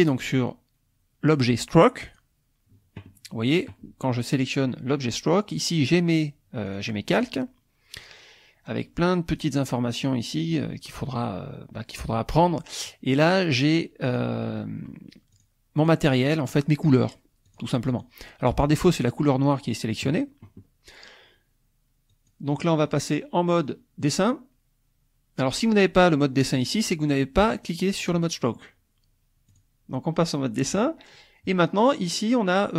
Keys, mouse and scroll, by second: 2.1 click, 6.7 click, 7.2 click, 9.3 click, 14.1 click, 15.4 click, 15.8 click, 16.5 click, 17.5 click, 17.9 click, 22.1 click, 27.6 click, 28.2 click, 29.5 click, 30.9 click.